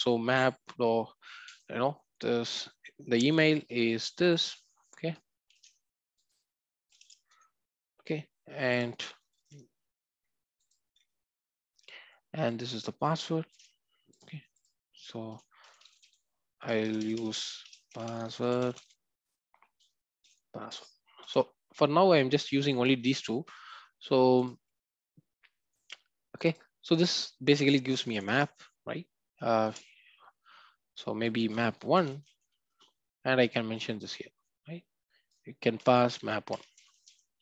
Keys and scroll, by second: 5.6 ctrl+c, 13.5 ctrl+c, 21.2 ctrl+v, 28.1 alt+Return.